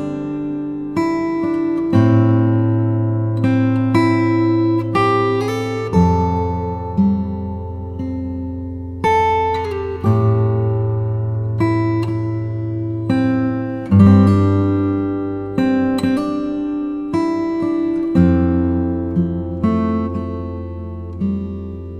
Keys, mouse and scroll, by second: 0.4 click, 1.2 click, 1.8 scroll down 1, 2.5 g, 2.9 x, 3.8 x, 5.1 x, 5.6 x, 6.8 click, 7.2 s, 7.5 y, 9.9 click, 10.8 ctrl+r, 11.4 ctrl+r, 11.5 ctrl+click, 11.8-13.0 middle drag, 13.0 g, 13.5 z, 15.2 click, 15.9 middle click, 17.0 ctrl+r, 17.7 click, 18.5-20.4 drag, 21.4 Tab.